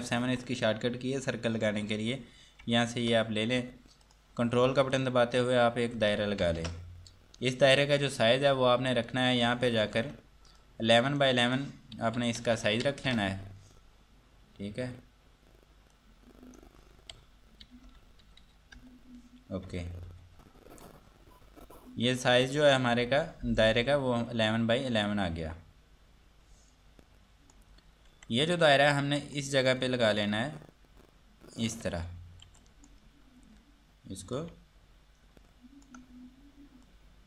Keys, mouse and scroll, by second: 2.9 ctrl+Num_Lock, 3.4 4, 4.3 click, 5.1 ctrl+click, 6.6 ctrl+space, 9.7 ctrl+Num_Lock, 10.1 4, 16.1 click, 20.6 4, 22.4 click, 28.3 F2, 29.1 click, 32.8 click, 37.1 click.